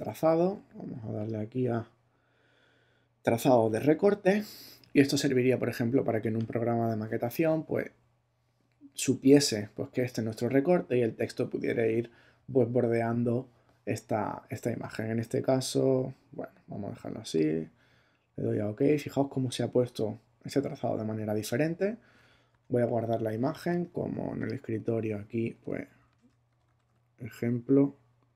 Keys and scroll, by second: 22.5 shift+super+s, 25.7-27.3 typing.